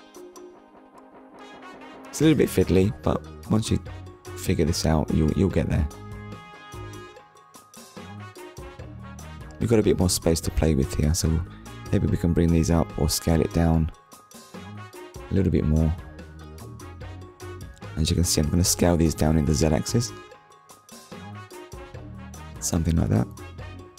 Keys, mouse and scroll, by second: 3.5 middle click, 4.8 KP_1, 5.7 shift+middle click, 6.5 scroll up 1, 9.5 click, 10.6-11.0 scroll down 2, 11.0 shift+middle click, 13.5 click, 22.3 click.